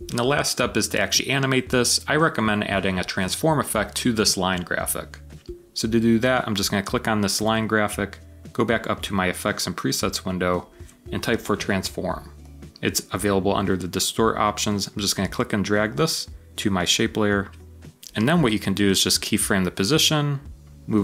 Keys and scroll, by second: 5.3 typing, 10.8-11.6 typing.